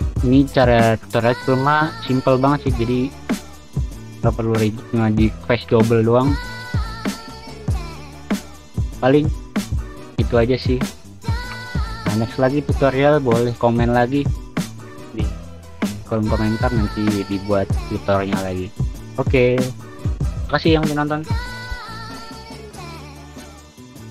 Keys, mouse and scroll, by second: 2.3-5.8 typing, 8.8 w, 9.4 w, 10.7 d, 11.7 w, 12.2 space, 13.8 s, 14.2 d, 14.6 space, 14.6 click, 14.8 w.